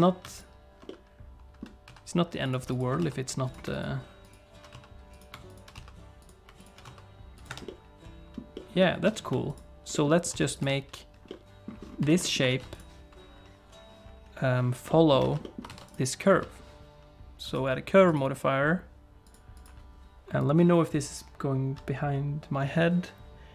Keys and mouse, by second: 0.3 alt+click, 0.9 middle click, 2.7 alt+click, 3.0 s, 3.7 alt+click, 4.7 s, 5.7 s, 6.8 s, 7.5 Tab, 7.7 middle click, 8.5 middle click, 8.8 middle click, 9.1 Tab, 9.5 alt+click, 9.9 middle click, 10.3 s, 10.6 Tab, 11.3 middle click, 12.1 shift+middle click, 12.2 middle click, 12.5 ctrl+s, 14.9 middle click, 15.2 alt+a, 15.4 middle click, 15.7 ctrl+s, 15.9 click, 17.5 click.